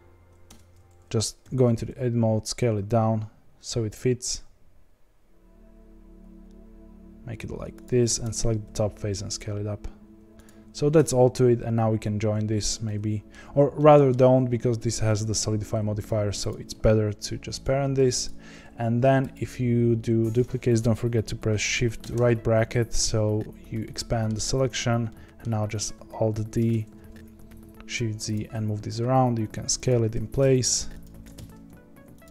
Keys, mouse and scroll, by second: 0.4 Tab, 1.4 s, 8.0 3, 8.3 click, 8.6 s, 10.9 Tab, 12.8-13.3 middle drag, 13.3-13.7 scroll down 1, 13.7-15.1 middle drag, 15.1 click, 16.0 click, 16.4 shift+click, 18.2 ctrl+p, 18.5-19.3 scroll down 6, 19.3 click, 22.1 shift+], 23.5 scroll down 2, 23.8-26.3 middle drag, 26.3 alt+d, 28.5 s, 30.1 g, 31.0 alt+d, 32.2 s.